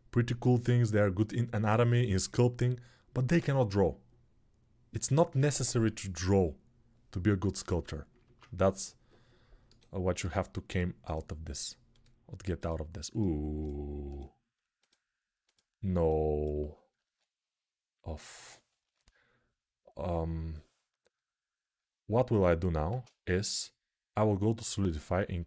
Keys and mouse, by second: 8.0 ctrl+Tab, 8.5-11.0 middle drag, 9.4-25.4 right drag, 12.4 click, 15.3 click, 22.7 ctrl+space, 24.5-25.4 drag, 24.5-25.4 middle drag.